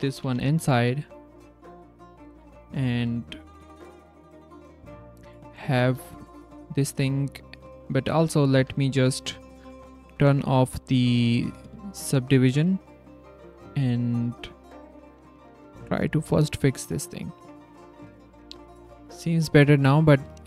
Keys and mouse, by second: 0.1 e, 1.8 click, 3.6 z, 3.9 click, 4.5 z, 5.5 click, 6.1 z, 6.4 click, 6.8 z, 7.2 click, 7.2 right click, 8.1 click, 8.5 z, 8.9 click, 8.9 right click, 10.1 click, 10.4 middle click, 11.4 click, 11.6 a, 11.7 s, 12.5 click, 13.2 click, 13.8 click, 14.1 click, 14.8 click, 15.3 Tab, 16.6 click, 17.0 click, 17.6 click, 18.0 click, 18.5 click, 20.1 click.